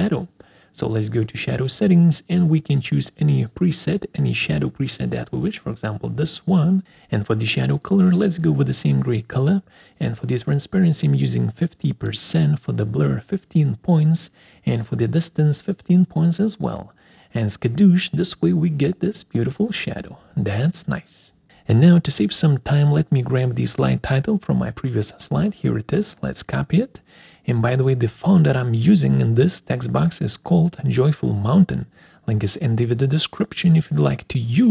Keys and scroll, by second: 19.1 Return, 27.2 ctrl+c.